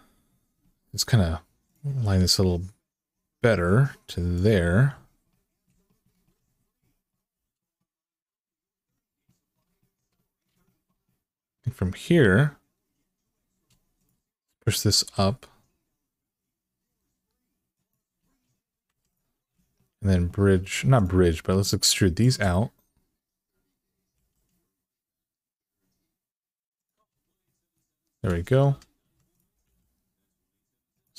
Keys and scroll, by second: 1.8 g, 14.8 g, 18.6 2, 23.9 e, 28.5-29.4 typing.